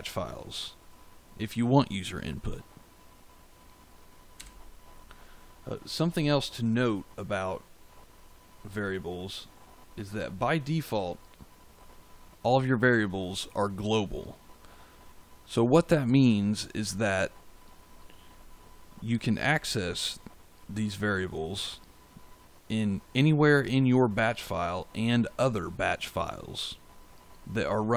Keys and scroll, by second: 4.3 f.